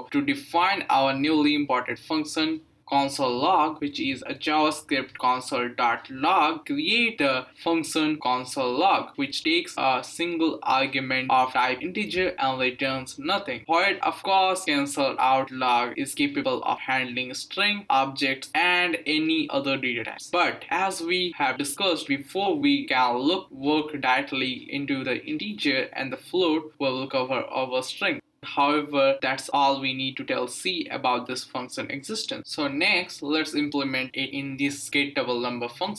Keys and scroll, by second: 3.3 Return, 3.7 Up, 3.9-9.6 typing.